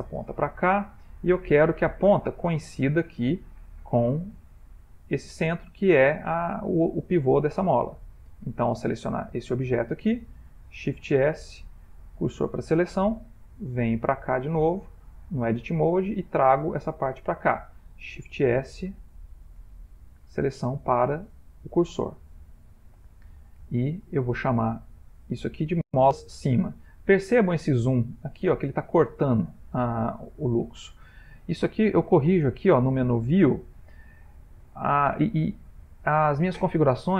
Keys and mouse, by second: 0.6 ctrl+middle click, 0.6 ctrl+middle click, 2.6 middle click, 3.6 ctrl+middle click, 7.3 Tab, 8.3 click, 8.5 click, 9.3 click, 10.8 shift+s, 13.8 click, 15.1 Tab, 15.9 click, 18.2 shift+s, 19.1 shift+s, 22.6 ctrl+middle click, 23.8 ctrl+middle click, 28.0 ctrl+middle click, 32.5 click.